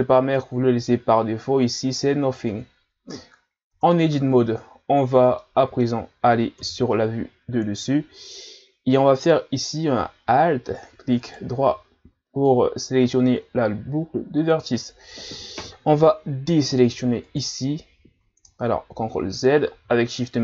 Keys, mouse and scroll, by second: 3.7 Tab, 5.4-6.6 middle drag, 6.6 KP_7, 11.2 alt+right click, 17.3 right click, 19.0 ctrl+z.